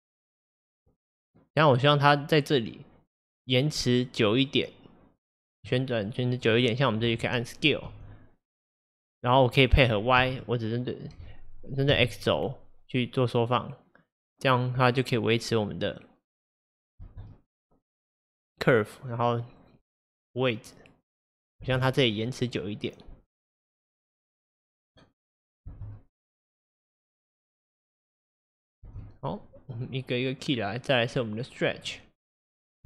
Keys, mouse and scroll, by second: 6.1-8.0 drag, 8.0 s, 17.0 space, 21.7 space, 22.3-25.7 drag, 25.7 space, 28.9 space, 31.8 click, 32.4 click.